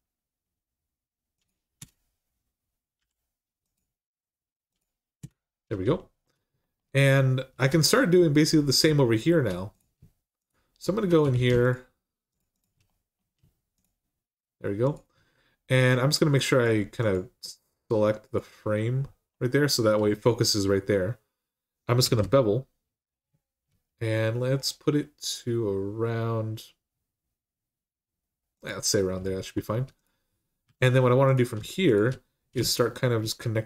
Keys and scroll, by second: 1.6 Return, 2.8 k, 5.0 Return, 11.1 ctrl+z, 21.9 ctrl+b, 30.4 1.